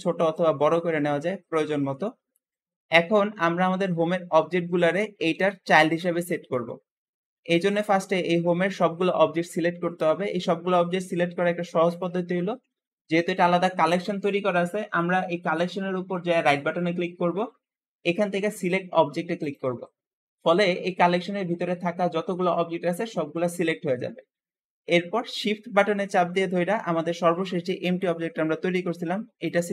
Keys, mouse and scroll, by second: 4.8 click, 5.2 g, 6.4-9.4 middle drag, 11.7 click, 13.0 click, 16.3-20.9 right drag, 20.9-21.7 scroll down 5, 21.7-22.4 scroll up 6, 22.4-23.5 scroll down 3, 23.5-24.5 scroll up 5, 24.5-25.0 scroll down 3, 25.0-28.1 middle drag, 29.3 shift+click.